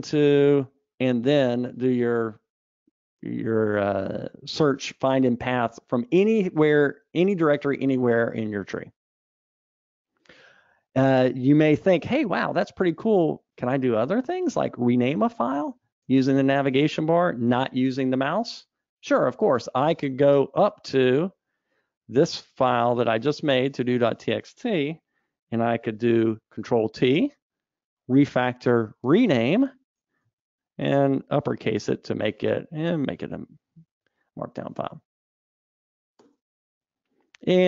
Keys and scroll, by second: 11.3 Escape, 16.5 super+Up, 26.9 ctrl+alt+t, 29.5 shift+F6.